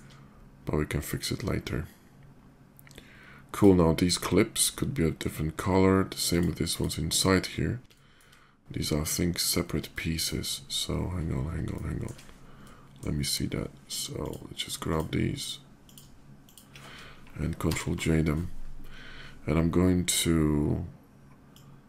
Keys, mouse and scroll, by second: 2.7-3.3 middle drag, 3.3 click, 6.0 click, 6.4 click, 7.7-8.2 shift+middle drag, 8.4-8.9 shift+middle drag, 9.6 shift+middle click, 11.5-11.8 shift+middle drag, 12.1 middle click, 12.6 shift+middle click, 14.0 shift+click, 14.7 click, 15.1 shift+click, 15.6 shift+click, 16.2 shift+click, 17.4 ctrl+j, 21.2-21.8 drag.